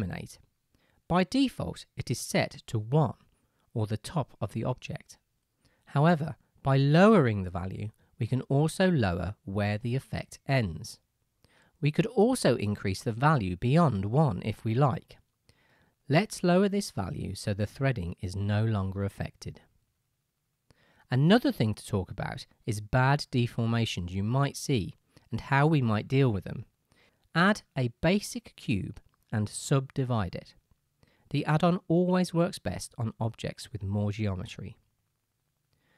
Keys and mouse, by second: 11.0 middle click, 11.2 middle click, 23.2-27.8 right drag, 27.6 shift+a, 29.6 g, 31.1 Tab, 31.1-34.8 drag.